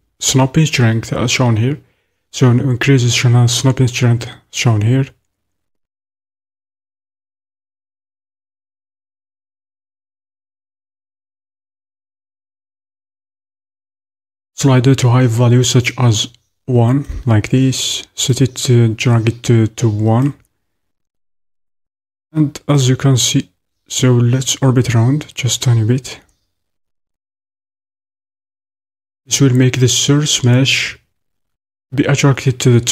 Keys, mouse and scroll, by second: 23.5-32.9 drag.